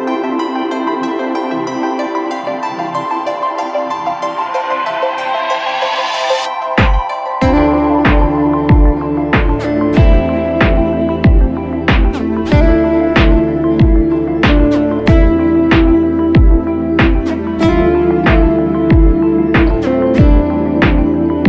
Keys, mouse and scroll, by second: 0.0-1.0 typing, 3.3 typing, 10.0 double click.